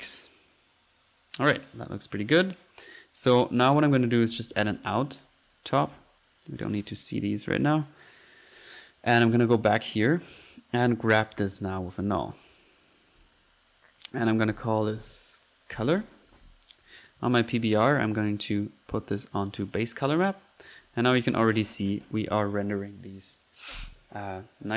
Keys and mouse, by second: 0.5 click, 1.3 click, 2.3 click, 2.6-5.0 typing, 3.7 right click, 5.2 drag, 5.5 drag, 6.7 click, 7.7 click, 8.6 click, 9.2 middle click, 10.8 right click, 11.0 right click, 11.1-11.9 typing, 12.6 click, 13.2-13.7 ctrl+drag, 13.4 typing, 13.8-14.2 ctrl+drag, 14.3 ctrl+click, 16.8 click, 18.0 click, 19.7-21.3 drag, 22.9-23.3 drag, 24.0 click, 24.5-24.7 drag.